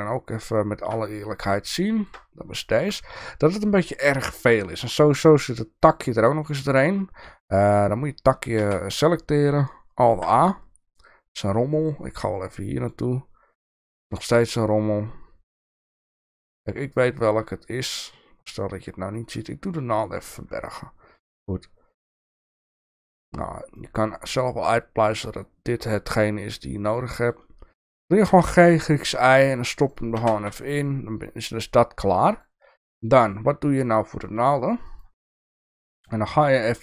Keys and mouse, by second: 1.6-2.2 shift+middle drag, 2.8 shift+middle click, 5.2 click, 8.6 Tab, 10.0 alt+a, 12.5 click, 15.6 click, 19.3 click, 20.6 middle click, 22.0-23.4 middle drag, 23.9 middle click, 25.1 click, 25.8-27.3 middle drag, 28.2 g, 30.1 Tab, 30.5 middle click, 32.3 click, 35.4 middle click, 36.3-36.8 shift+middle drag.